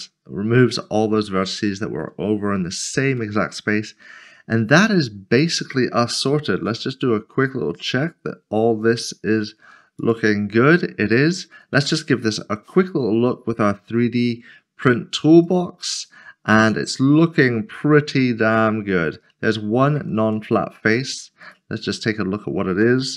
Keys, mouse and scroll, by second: 1.7 shift+middle click, 2.6 scroll up 1, 3.2 middle click, 6.9 click, 7.6 middle click, 10.0 q, 10.1 click, 11.7 Tab, 13.9 click, 20.2 Tab, 21.4 Tab, 22.9 click.